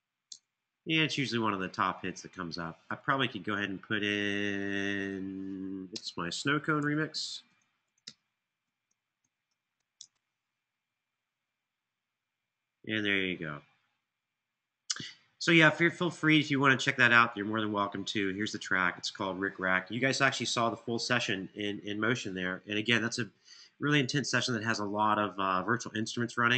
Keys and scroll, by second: 0.1 Return, 5.6-9.7 typing, 9.7 Return.